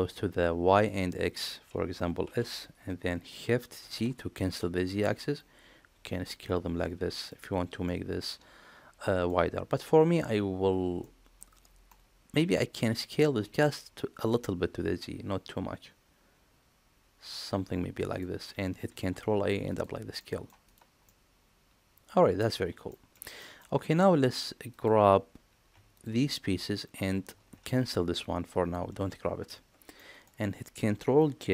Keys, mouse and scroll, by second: 2.2 s, 7.8-9.2 middle drag, 10.9-11.3 middle drag, 11.8 middle click, 12.7 s, 18.8 ctrl+a, 20.1-20.4 middle drag, 21.0-22.3 middle drag, 22.8 shift+middle click, 23.3 middle click, 25.9 shift+click, 29.9 middle click.